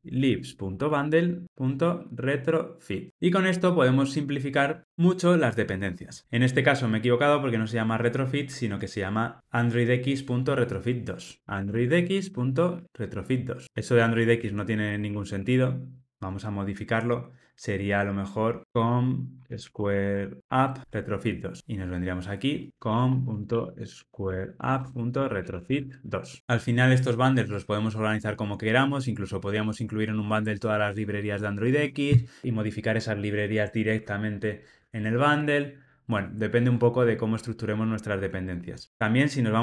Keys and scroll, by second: 2.9 Tab, 6.2 super+z.